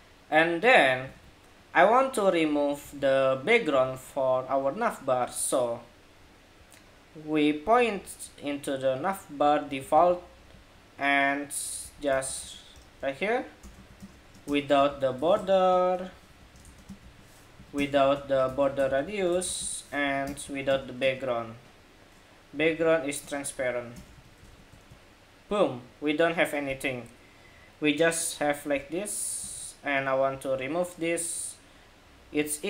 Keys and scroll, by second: 0.9 super+Tab, 2.6 super+Tab, 3.6 super+Tab, 9.7 super+c, 13.5 super+v, 23.8 super+s, 24.1 super+Tab, 24.4 super+r, 29.3 super+Tab.